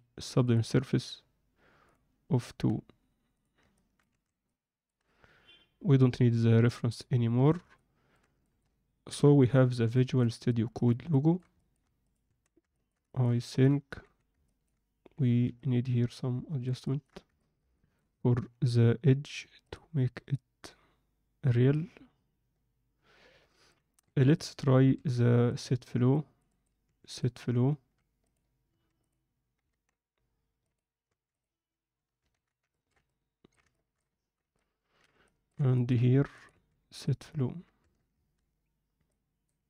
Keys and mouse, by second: 0.5-1.9 drag, 3.7 middle click, 4.3 alt+a, 4.4-4.8 middle drag, 6.8 click, 7.3 alt+a, 7.7-8.1 middle drag, 8.4 ctrl+alt+middle click, 9.1 KP_7, 9.9 alt+shift+middle drag, 10.5 ctrl+alt+middle click, 11.1 alt+shift+middle click, 11.5 ctrl+middle drag, 12.0 click, 12.2 Tab, 12.7 ctrl+alt+middle click, 13.1 alt+shift+middle click, 13.4 ctrl+middle click, 14.0 z, 14.4 ctrl+middle click, 15.1 z, 15.5-16.6 alt+middle drag, 16.8 ctrl+alt+right click, 17.3 ctrl+middle click, 17.7 shift+middle click, 19.6-21.5 drag, 21.7-23.7 alt+middle drag, 24.0 2, 24.2 click, 24.9 q, 26.2 click, 26.8 q, 28.7 q, 29.7 ctrl+z, 30.6 click, 31.0 q, 32.3 ctrl+z, 32.7 ctrl+alt+middle click, 33.0 middle click, 33.7 alt+shift+middle click, 34.5 middle click, 35.2 shift+middle click, 35.7 ctrl+alt+middle click, 36.5 q, 37.8 Tab, 39.1 click.